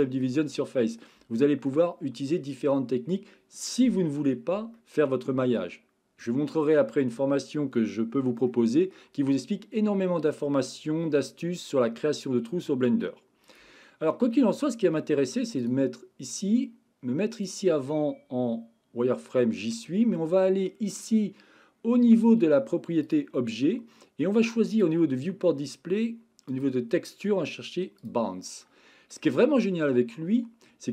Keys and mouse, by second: 0.2-1.0 middle drag, 1.3-1.7 shift+middle drag, 4.7-5.6 middle drag, 6.3 middle click, 8.5 middle click, 14.3-14.9 middle drag, 15.6 click, 17.5-19.3 drag, 23.0 click, 24.7 click, 26.5-28.1 drag, 28.6-29.1 middle drag.